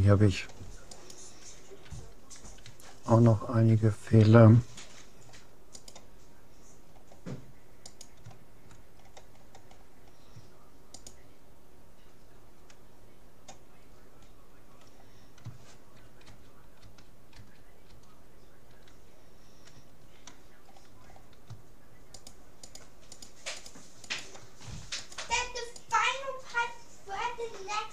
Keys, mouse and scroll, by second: 0.9-2.7 right drag, 2.7 shift+c, 2.7 d, 2.7 i, 2.9-4.7 middle drag, 5.9-7.5 right drag, 6.9-8.7 middle drag, 7.9-9.7 right drag, 9.1-11.9 middle drag, 11.1-12.9 right drag, 13.9-15.9 middle drag, 15.9 click, 16.3 ctrl+z, 16.9 ctrl+z, 20.7-22.3 middle drag, 22.3-27.5 right drag, 25.1 shift+e.